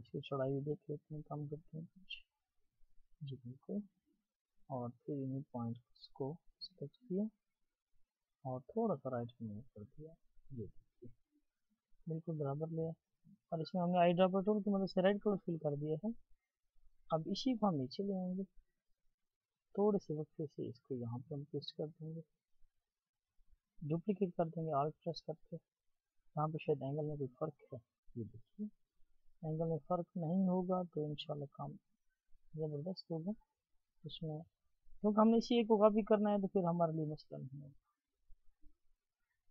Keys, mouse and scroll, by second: 7.3 shift+click, 27.1-28.3 alt+scroll up 1, 28.3-33.9 scroll up 1.